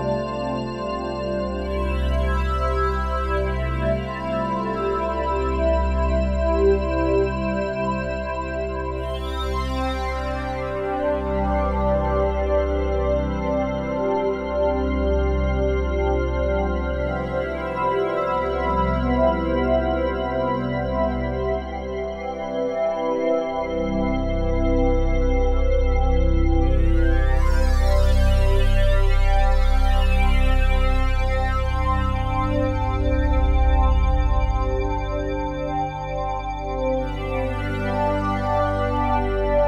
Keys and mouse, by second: 1.8-4.3 shift+drag, 4.9 typing, 5.6-6.1 drag, 6.8-7.6 typing, 7.8-10.4 alt+drag, 11.5-13.9 alt+drag, 14.4-15.5 drag, 17.0-20.8 alt+drag, 20.3-21.1 typing, 21.1-22.1 drag, 22.2-24.1 drag, 24.1-24.8 typing, 25.3 Return, 27.8 right click, 29.1 click, 30.7 right click, 30.9 click, 32.2-33.1 drag, 33.6 ctrl+s, 34.1 alt+a, 35.2-36.5 ctrl+alt+drag, 36.8 F12.